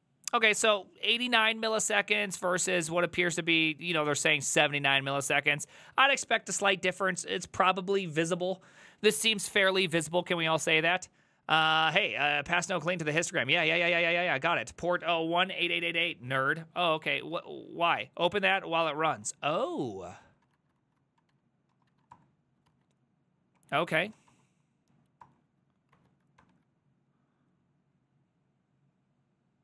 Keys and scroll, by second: 1.4 ctrl+a, 1.6 [, 1.8 ctrl+u, 2.0 ctrl+u, 2.4 ctrl+u, 2.6 ctrl+u, 2.7 ctrl+u, 5.0 ctrl+d, 5.2 ctrl+d, 5.3 ctrl+d, 5.4 ctrl+d, 5.6 ctrl+d, 5.7 ctrl+d, 5.9 ctrl+d, 6.0 ctrl+d, 17.0 alt+{, 19.2 alt+{, 19.7 alt+[, 20.5 ctrl+l, 20.6 Right, 20.8 ctrl+Left, 21.4 `, 21.8 shift+BackSpace, 21.9 1, 22.2 Return, 22.7 alt+{, 23.6 Up, 24.2 a, 24.3 Up, 25.3 Return, 26.0 alt+[, 26.4 ctrl+r.